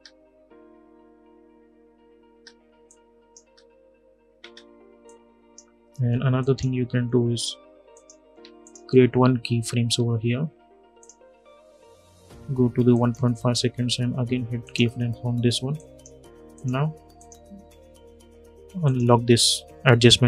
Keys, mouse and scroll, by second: 2.0 space, 2.6 click, 3.1 space, 4.8-6.1 drag, 8.3 shift+click, 9.5 p, 10.7 click, 11.6 =, 12.6-20.2 drag.